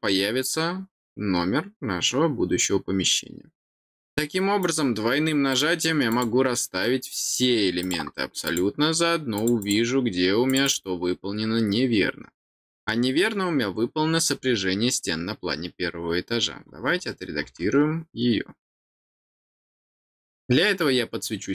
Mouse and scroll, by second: 3.9 click, 4.6 click, 5.5 click, 6.1 click, 7.8 click, 8.4 click, 9.3 click, 9.6 click, 10.5 click, 10.6 click, 12.7 scroll down 2, 13.9 middle click, 14.0-14.7 scroll down 4, 18.7 click.